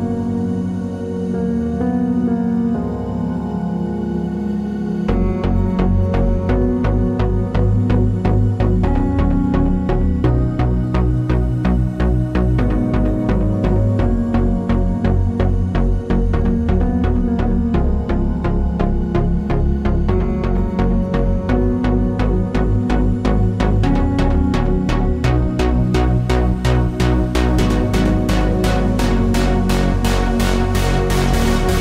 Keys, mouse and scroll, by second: 2.2 shift+click, 2.4-4.4 middle drag, 6.6 scroll down 1, 10.6 KP_1, 11.9-12.5 scroll up 1, 12.5 shift+d, 13.9-16.3 shift+drag, 14.7 KP_7, 15.1 Tab, 15.3 scroll down 1, 16.3 Tab, 19.9 KP_3, 25.1 shift+click, 25.8 KP_7, 26.5 s, 29.1 shift+click, 29.6 shift+click, 29.9 shift+click, 30.4 Tab, 31.2-31.8 middle drag.